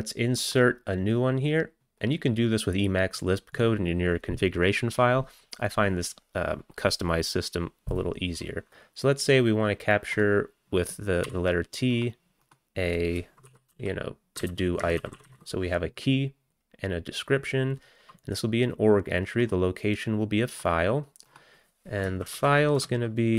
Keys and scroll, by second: 11.3 t, 13.2-15.9 typing, 22.2 ctrl+BackSpace, 22.5 ctrl+BackSpace, 22.8 ctrl+BackSpace, 23.2-23.3 typing.